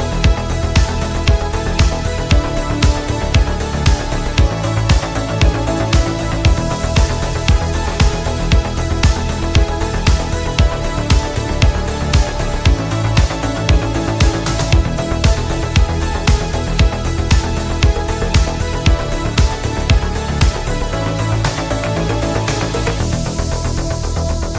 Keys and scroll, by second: 6.4 ctrl+z, 14.0 ctrl+z.